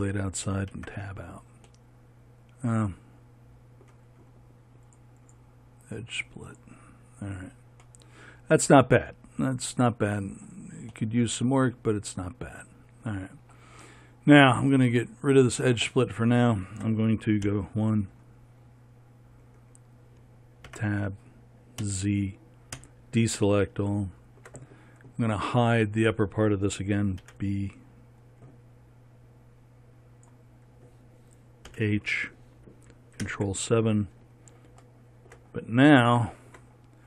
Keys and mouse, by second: 1.2 Tab, 7.0-17.9 drag, 17.9 KP_1, 20.1-21.5 drag, 21.2 Tab, 22.3 z, 23.3 a, 27.7 b, 32.2 h, 33.7 ctrl+KP_7.